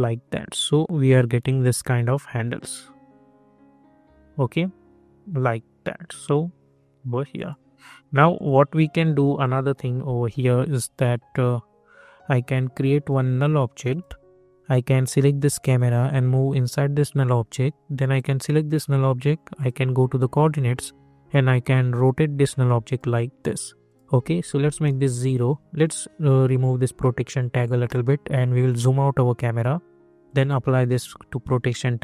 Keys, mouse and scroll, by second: 2.5 click, 7.3-23.9 drag, 24.8 Return, 25.9-28.0 drag, 28.0 scroll down 1, 30.4-32.0 drag.